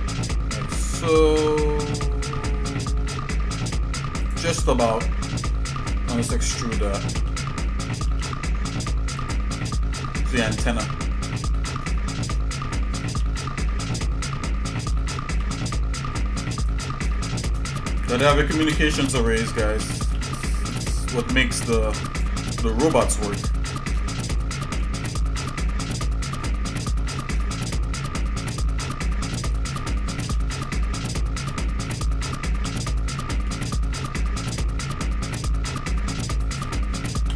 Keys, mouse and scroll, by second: 4.8 shift+middle click, 6.7 e, 10.0 scroll down 1, 10.7 middle click, 11.4 middle click, 11.9 shift+middle click, 14.9 g, 17.1 shift+middle click, 17.7 middle click, 18.7 ctrl+KP_Add, 19.8 s, 21.6 s, 22.6 shift+middle click, 23.5 shift+middle click, 24.7 KP_1, 26.2-27.3 shift+middle drag, 27.9-28.5 scroll up 3, 29.5 g.